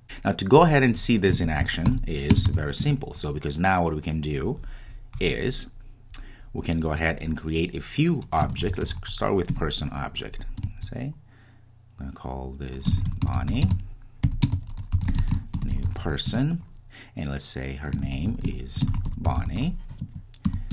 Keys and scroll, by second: 9.8 Return, 10.0 Return, 16.3 Return.